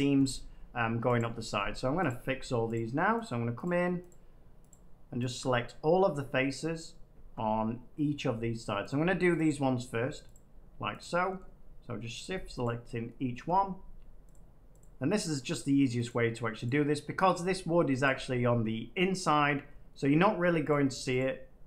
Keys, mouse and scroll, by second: 1.1 click, 2.0 click, 2.7 shift+click, 3.0 shift+click, 3.1 shift+click, 6.1 middle click, 6.5-6.9 scroll down 5, 7.4-7.9 scroll up 2, 8.8 shift+click, 9.3 middle click, 11.3 shift+middle click, 12.1 shift+click, 12.5 shift+click, 13.3 shift+middle click, 14.2 shift+click, 14.7 shift+click, 19.1 middle click, 19.6 middle click, 19.7 middle click, 20.6 shift+click.